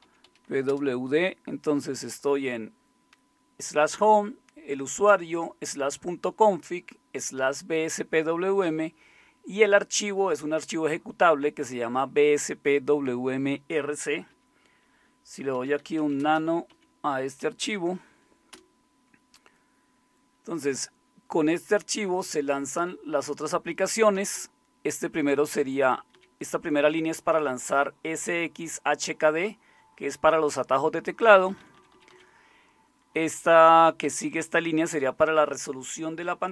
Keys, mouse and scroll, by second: 0.0-0.8 typing, 15.3-18.5 typing, 18.5 Return, 24.2 Down, 24.4 Down, 26.1 Down, 31.4 Down, 31.6 Down, 31.8 Down, 31.9 Down, 32.1 Down, 33.3 Up, 33.5 Up, 34.0 typing.